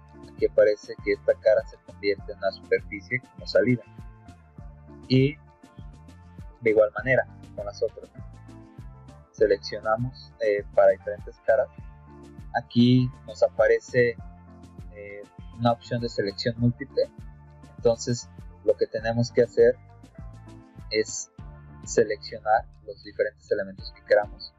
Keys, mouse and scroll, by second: 7.2 click, 8.3 click, 9.4 middle click, 11.1 click, 13.2 click, 16.3 middle click, 20.0 click.